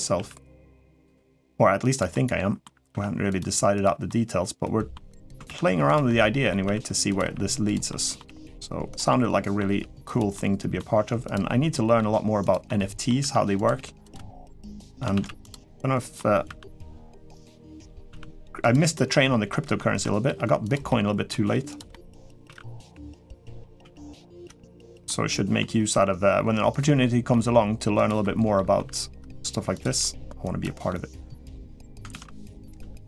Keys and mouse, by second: 0.9 g, 1.9 middle click, 2.7 r, 3.2 g, 3.8 middle click, 5.2 shift+d, 5.8 middle click, 6.4 r, 7.0 g, 7.7 middle click, 8.2 g, 8.9 middle click, 9.9 g, 10.1 middle click, 10.7 g, 11.2 middle click, 11.9 g, 12.4 middle click, 13.0 r, 13.5 g, 14.0 middle click, 14.9 shift+d, 15.4 middle click, 16.4 r, 17.3 middle click, 17.9 r, 18.7 middle click, 20.0 g, 20.7 middle click, 21.2-24.2 typing, 21.7 middle click, 24.8 middle click, 25.6 g, 26.8 middle click, 27.2 g, 28.0 middle click, 28.5 r, 29.6 g, 30.7 middle click, 31.5 middle click, 31.9 shift+d, 32.6 r.